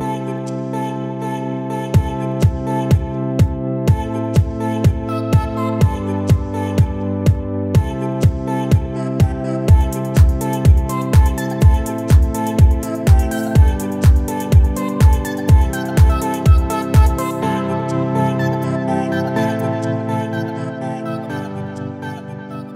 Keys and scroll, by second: 1.1 9, 1.3 7, 5.1 ctrl+1, 6.1 space, 11.7 space, 17.8 ctrl+0.